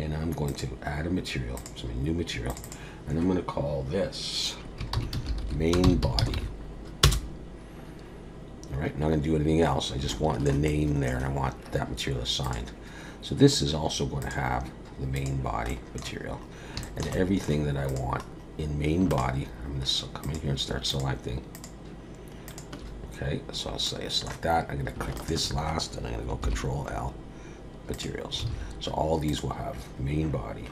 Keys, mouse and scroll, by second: 0.5 click, 1.5 click, 2.5 click, 2.6 click, 8.5-10.0 scroll up 1, 10.1 shift+middle click, 10.7 middle click, 12.4 click, 14.2 click, 15.7 middle click, 16.2 scroll up 4, 16.8 shift+middle click, 17.1 middle click, 17.9 click, 18.2-19.0 scroll up 1, 19.0 scroll up 1, 19.1 shift+click, 20.2 click, 20.9 shift+click, 21.5 shift+click, 22.5 shift+click, 23.5-23.8 scroll down 2, 23.8 middle click, 25.2 shift+click, 26.4 ctrl+l, 28.5 alt+a, 29.2 click.